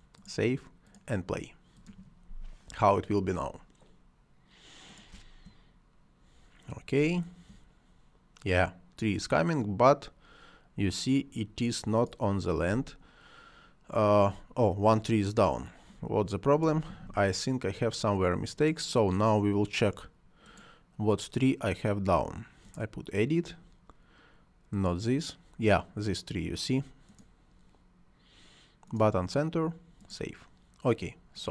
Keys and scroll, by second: 5.0 space, 6.8 space, 12.6 space.